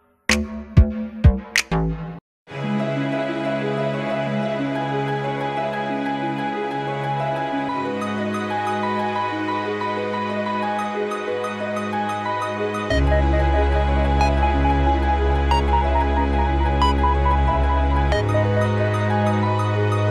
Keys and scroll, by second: 2.3-4.3 typing, 5.5-6.0 typing, 6.5 Return, 7.9-10.5 typing, 10.6 Return, 12.3-14.2 typing, 17.8 ctrl+g.